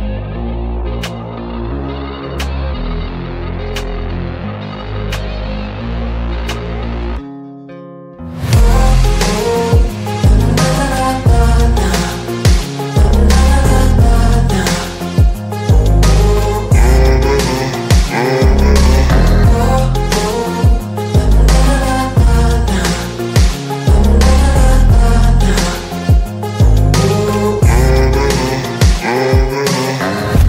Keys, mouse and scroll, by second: 3.2-5.7 alt+drag, 10.9-12.7 alt+shift+click, 14.1 space, 14.4 click, 14.6-16.9 space, 17.2 click, 21.0-23.5 alt+drag, 24.6-26.7 alt+drag.